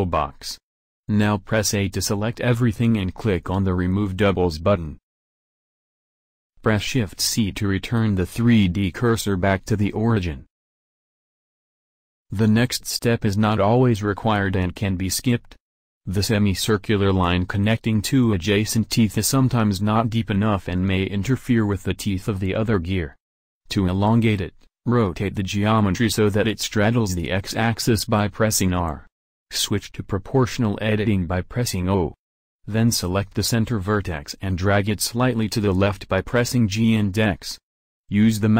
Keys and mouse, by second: 0.3 a, 0.7 a, 2.6-4.5 drag, 5.5 shift+c, 23.5 r, 28.2-30.5 drag, 30.5 o, 32.1-34.0 drag, 34.3 g.